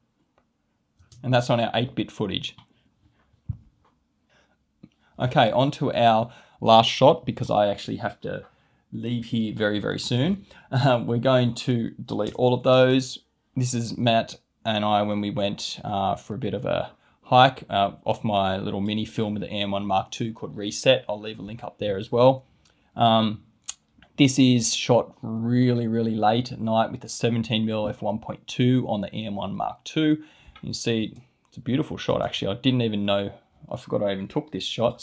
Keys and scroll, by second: 1.0 space, 31.0 space.